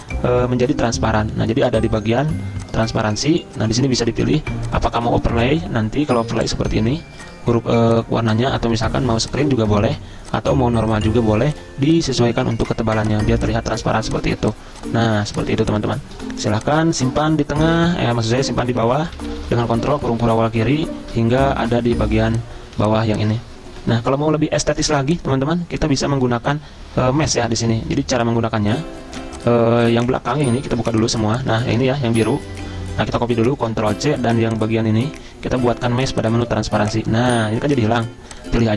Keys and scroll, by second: 6.3 v, 15.3 z, 16.2 v, 17.8 ctrl+[, 18.0 ctrl+[, 21.2 ctrl+], 21.4 ctrl+], 22.7 z, 24.9 v, 30.7 ctrl+alt+2, 32.1 ctrl+z, 33.6 ctrl+c.